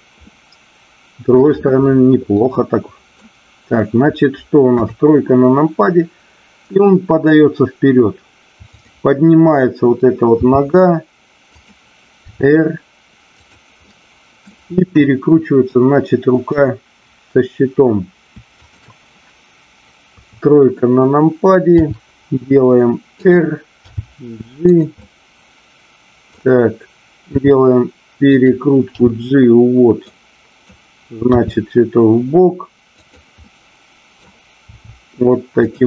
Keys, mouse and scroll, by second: 0.1-1.3 middle drag, 2.3-3.3 middle drag, 4.6 KP_3, 8.7 click, 11.6 click, 13.8-14.4 middle drag, 14.7-15.5 middle drag, 18.6-19.6 shift+drag, 20.1 KP_3, 21.7 r, 23.3 click, 23.8 g, 24.7 click, 24.9-26.3 middle drag, 27.2 r, 28.3 click, 29.1 g, 30.2 click, 33.4 middle click, 34.7 r.